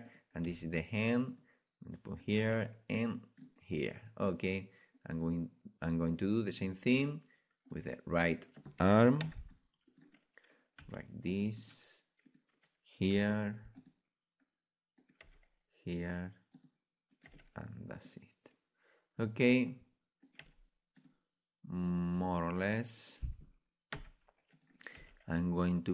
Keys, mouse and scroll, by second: 0.0 click, 0.0 right click, 0.4 g, 0.5-2.2 drag, 2.4 g, 2.9-5.1 drag, 5.1-8.3 right drag, 9.5 click, 9.5 c, 10.0 right click, 10.8 r, 13.1 g, 13.2 click, 13.5 right click, 13.7 right click, 13.8-14.9 drag, 15.2 g, 15.4 click, 17.3 g, 19.0-23.0 drag, 20.4 g, 24.5-25.9 right drag, 24.5 c, 24.9 g.